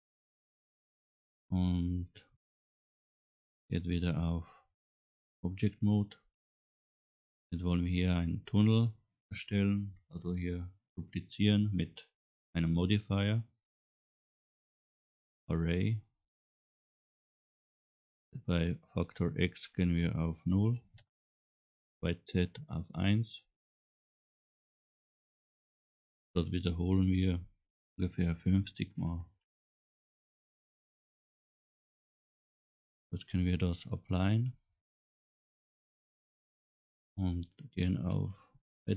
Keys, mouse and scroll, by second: 0.1-2.1 middle drag, 2.4 scroll up 1, 4.9 Tab, 5.7 scroll down 1, 6.1 middle click, 7.2 scroll down 1, 7.8 scroll down 2, 13.1 click, 14.5-16.0 drag, 19.4-21.0 drag, 22.6-24.8 drag, 27.3-29.9 drag, 30.7-31.5 scroll down 5, 32.1-32.8 scroll up 7, 34.3-35.7 drag.